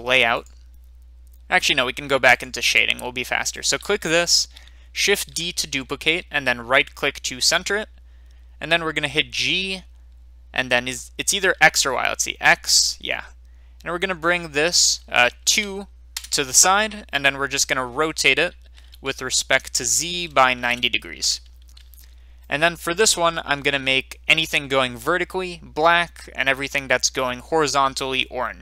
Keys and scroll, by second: 5.1 d, 9.4 g, 11.5 x, 15.4 2, 16.1 Return, 19.8-20.6 typing, 21.4 Return.